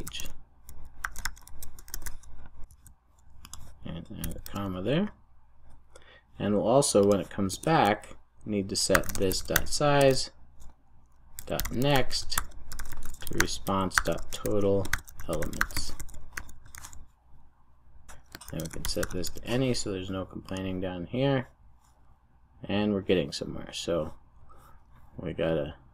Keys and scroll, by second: 4.4 super+s, 9.9 Return, 16.6 super+s, 19.2 super+s.